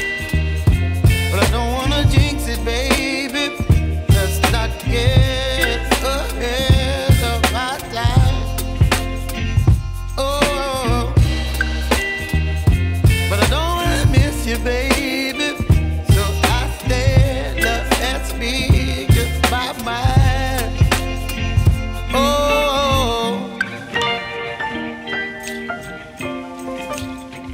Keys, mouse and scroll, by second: 1.2 right click, 2.6 scroll up 1, 3.7 ctrl+shift+click, 4.4 right click, 5.7 ctrl+shift+click, 6.8 right click, 7.5 scroll up 1, 8.9-11.1 drag, 11.5 right click, 12.3 scroll down 1, 12.5 scroll up 1, 12.7 right click, 13.7 ctrl+shift+click, 21.8 Return, 22.2-27.5 right drag.